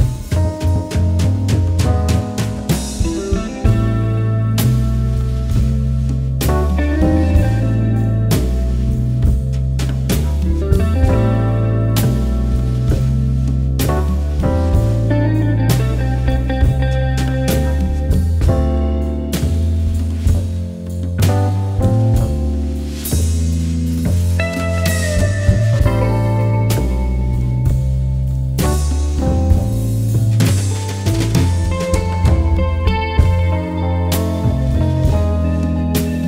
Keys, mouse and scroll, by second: 0.5 alt+click, 5.0 alt+scroll down 1, 7.5 alt+scroll down 1, 7.6 space, 7.6 click, 7.9 space, 8.4 alt+scroll up 1, 9.9 alt+click, 10.7-11.0 alt+scroll down 1, 12.0-12.3 scroll, 13.3-13.8 alt+scroll up 1, 14.2-15.3 alt+scroll down 1, 15.6 click, 19.5-21.0 alt+scroll up 3, 21.0 alt+scroll down 1, 21.9 alt+scroll up 1, 22.0 click, 22.3 space, 22.7 space, 23.6 click, 27.0-30.1 drag, 34.6 click.